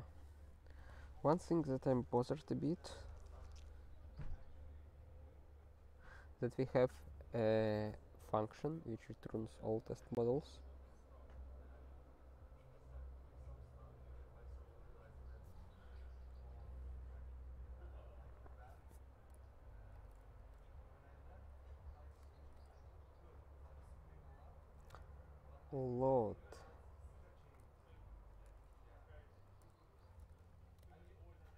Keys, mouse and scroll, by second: 0.0 ctrl+s, 0.6 alt+., 19.9 click, 20.1 click, 20.4 Return, 22.3 (, 24.2-25.5 typing, 27.3-30.9 typing, 28.5 ctrl+BackSpace.